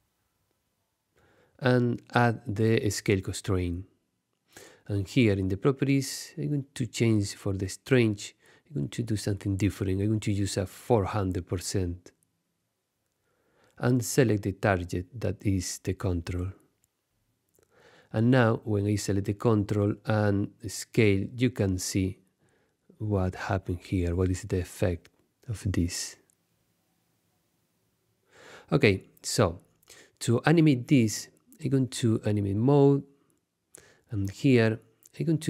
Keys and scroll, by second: 9.7-10.7 typing, 27.6 shift+super+z, 30.7 Tab, 31.3 super+Tab.